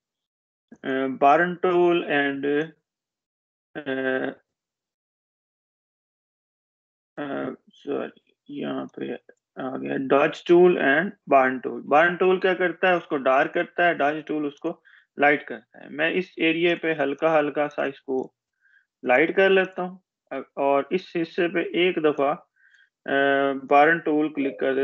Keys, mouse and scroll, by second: 8.5-9.3 drag, 14.5 click, 22.3-23.5 drag.